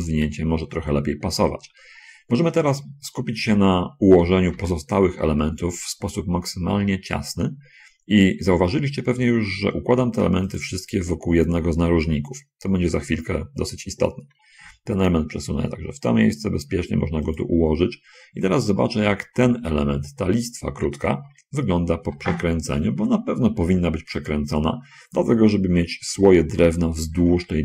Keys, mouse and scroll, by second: 4.5 l, 4.6 g, 10.5 click, 14.7 l, 14.9 g, 17.7 click, 19.7 l, 22.4 r, 24.4 ctrl+click.